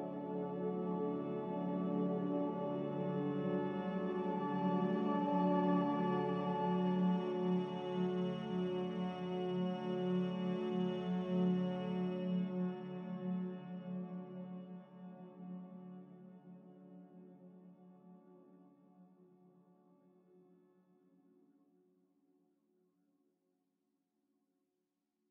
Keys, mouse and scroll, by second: 4.7 m, 8.8 3, 9.1 5, 9.3 Return, 12.1 b, 14.5 z, 18.8 b, 20.1 m.